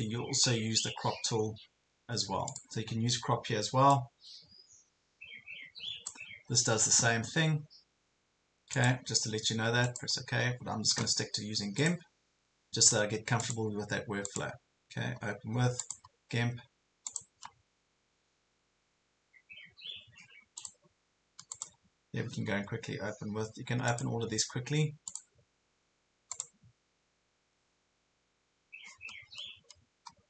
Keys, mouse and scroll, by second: 12.9 right click, 15.8 click, 21.5 right click, 23.9 click, 26.3 right click.